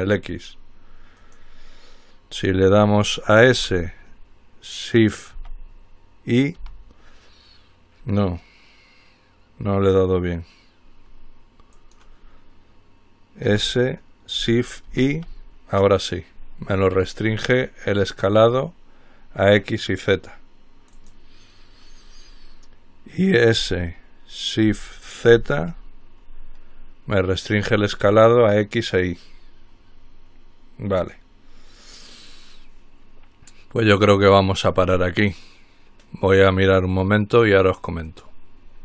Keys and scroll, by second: 3.9 s, 6.8 y, 13.7 s, 14.8-15.6 typing, 23.8 s, 25.2-26.0 typing.